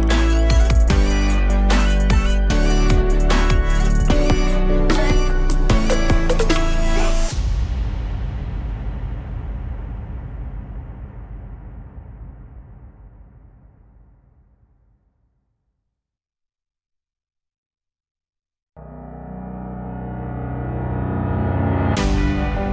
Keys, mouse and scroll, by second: 0.5 KP_0, 5.2 click, 16.5 click, 16.9-17.4 scroll down 4, 17.4-18.4 alt+middle drag, 18.4-19.6 alt+drag.